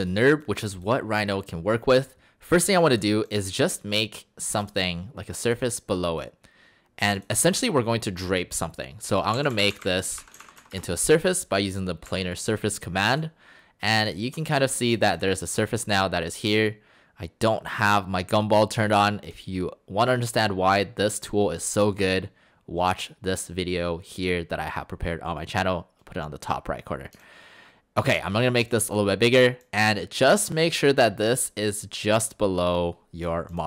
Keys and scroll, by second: 9.1-11.1 typing, 12.1 Delete.